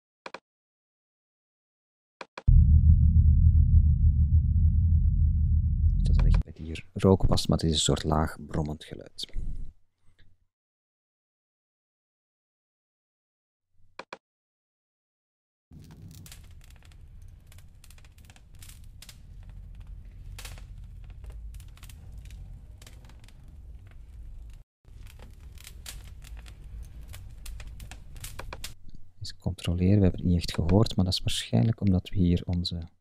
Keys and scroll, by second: 18.2 Up, 18.4 Left, 18.6 Up, 25.2 Left, 25.3 Up, 26.3 Left, 26.4 Up, 27.1 Right, 27.2 Up, 27.7 Right, 27.8 Up.